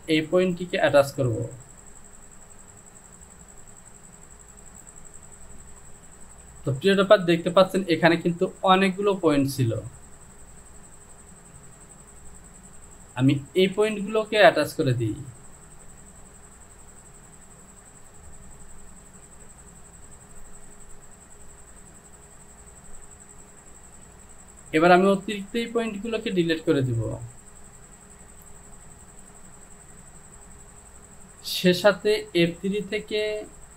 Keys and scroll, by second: 6.6 Delete, 24.3 Delete.